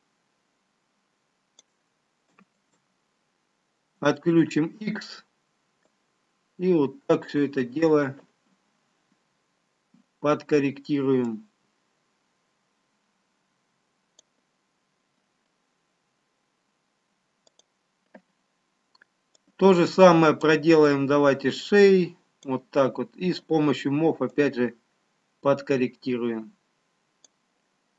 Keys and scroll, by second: 6.4 ctrl+z, 7.8 x.